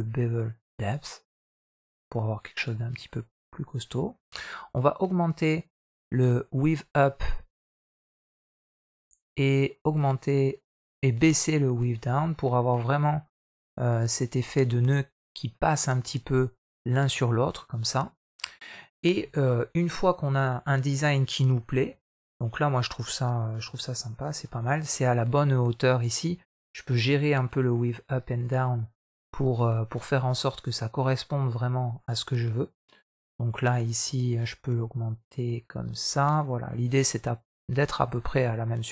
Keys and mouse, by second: 6.0-8.7 shift+drag, 9.3-12.6 shift+drag, 13.3-15.2 shift+drag, 15.9-18.6 middle drag, 19.2-20.4 middle drag, 21.8 middle click, 22.0 KP_1, 23.5 KP_3, 24.7 shift+middle click, 27.2-32.6 drag, 33.2-36.2 shift+drag, 38.6-38.9 middle drag.